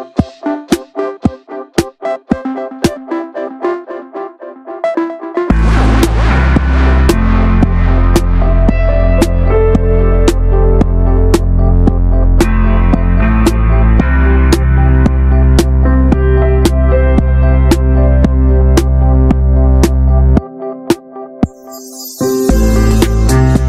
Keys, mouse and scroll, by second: 1.1 click, 3.8 click, 4.2 shift+middle click, 4.3 scroll up 1, 5.0 r, 6.5 click, 8.7 click, 8.8 l, 10.0 click, 10.2 ctrl+z, 10.6 click, 11.7 scroll down 1, 12.5 click, 13.7 click, 14.0 typing, 14.4 click, 15.0 shift+middle click, 15.1 scroll up 1, 15.8 click, 16.5-17.1 scroll down 1, 17.1 click, 17.6 click, 17.8 shift+middle click, 18.7 click, 19.2-19.6 shift+middle drag, 19.6 click, 21.6 click, 21.9 click, 22.3 l, 22.8 l, 23.3 click.